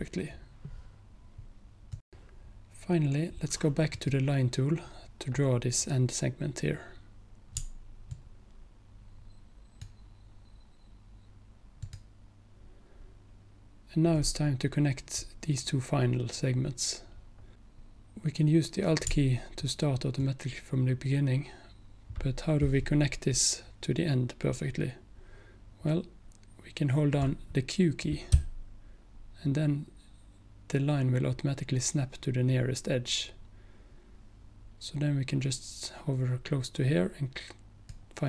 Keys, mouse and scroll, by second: 2.0 click, 4.0 click, 8.2-9.9 alt+drag, 11.9 alt+click, 28.4-29.3 q, 33.5 q.